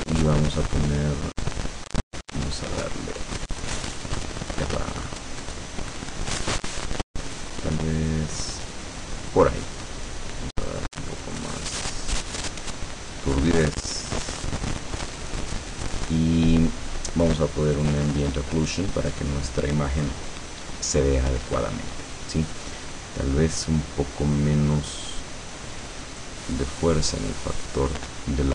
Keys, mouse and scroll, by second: 1.6-9.7 drag, 10.8-12.2 drag, 13.3-15.5 drag, 17.9 click, 26.3-28.5 drag.